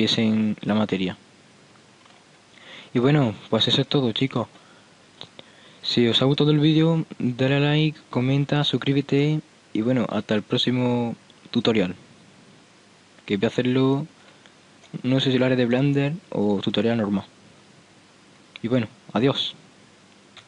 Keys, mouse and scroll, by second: 0.5 middle click, 0.7-1.5 middle drag, 2.3-3.7 middle drag, 15.0 middle click, 16.0 middle click, 17.7-18.8 middle drag.